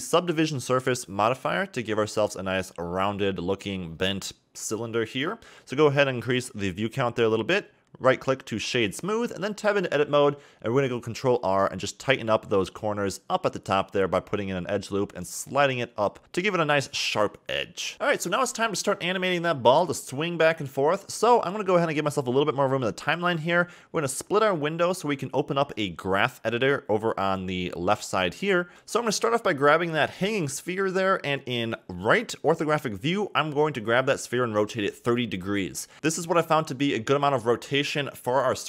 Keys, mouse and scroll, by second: 1.4-2.4 drag, 3.0-4.4 scroll down 12, 4.4 click, 6.1-7.6 right drag, 7.6-8.2 scroll up 3, 8.2 Tab, 8.9 a, 9.0 a, 9.8 ctrl+r, 16.7 Tab, 17.1 scroll down 2, 17.3 a, 17.4 a, 17.7-19.1 middle drag, 19.1 click, 19.5 scroll down 2, 19.8 middle click, 19.9 click, 20.6 r, 23.4-26.9 drag, 26.9-27.5 scroll up 4, 27.5 shift+middle click, 28.2-31.3 drag, 31.5-33.0 scroll down 2, 33.7 r.